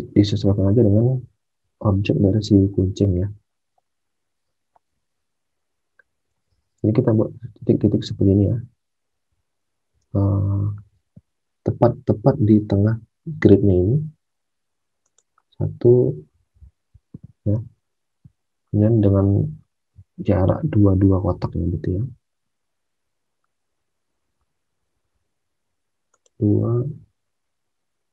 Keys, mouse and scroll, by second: 6.3 alt+Tab, 10.1 alt+Tab, 17.5 alt+Tab, 21.5 alt+Tab.